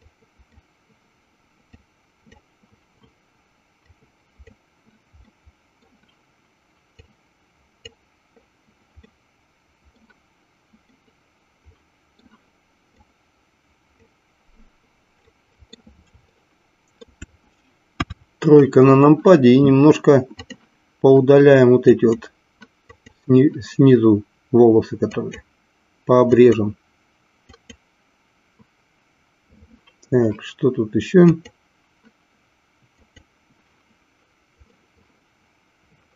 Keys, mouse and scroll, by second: 0.1 click, 2.0 click, 3.9 click, 5.3 middle click, 7.2 click, 9.1-10.2 middle drag, 10.9-12.2 middle drag, 13.3 click, 15.2 middle click, 16.5 shift+middle click, 18.0 KP_3, 22.1 click, 23.4 click, 26.5 click, 27.9 click, 31.4 click, 34.8-36.1 middle drag.